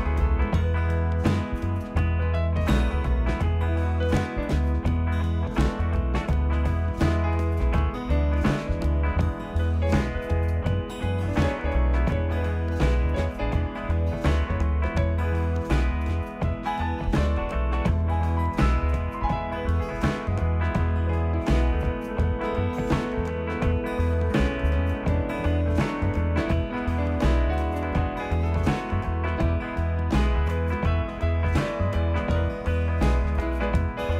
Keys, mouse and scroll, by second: 0.1 click, 0.7-1.6 typing, 2.6 click, 4.4 click, 7.1 click, 9.4 i, 10.9 i, 14.9 click, 16.2 click, 17.2 click, 20.5 click, 21.3-22.1 scroll, 24.5 click, 25.7 click, 26.8 click, 28.2 click, 28.9 click, 29.4-29.9 scroll, 30.0-31.0 scroll, 31.7 click, 32.9 click, 33.5-34.1 typing.